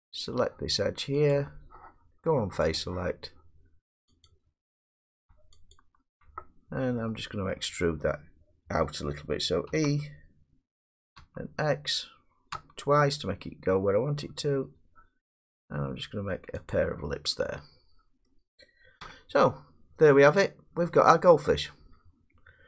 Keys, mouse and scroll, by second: 1.3 click, 2.7 click, 4.2 click, 5.7 alt+click, 6.4 middle click, 6.7-7.9 scroll, 9.7 e, 11.2 middle click, 11.2 scroll up 4, 11.2 x, 12.5 x, 16.7 click, 18.2 middle click, 19.0 Tab, 22.3 middle click.